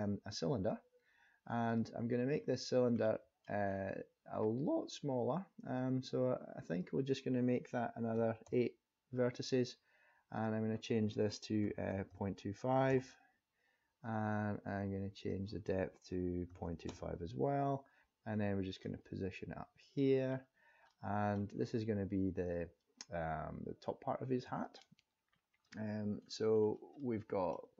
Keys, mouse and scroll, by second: 2.6-3.0 scroll down 2, 3.0 middle click, 3.6 scroll down 2, 6.7 click, 10.4 click, 15.2 click, 18.6 click, 20.2-20.8 scroll up 5, 20.9 middle click, 21.6-22.3 scroll up 2, 22.8 click, 25.3-25.8 scroll up 2, 25.8 middle click, 26.3-26.7 scroll down 2, 27.0 middle click.